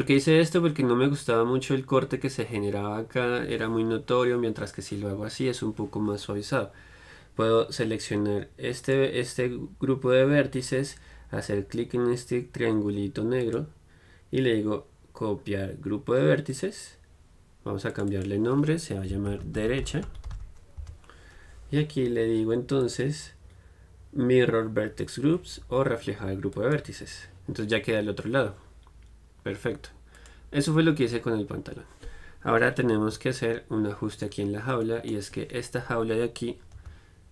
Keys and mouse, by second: 9.0-20.3 drag, 23.0-31.4 drag, 32.7-35.0 middle drag, 33.2 KP_Divide, 35.0-37.0 right drag, 37.0 g.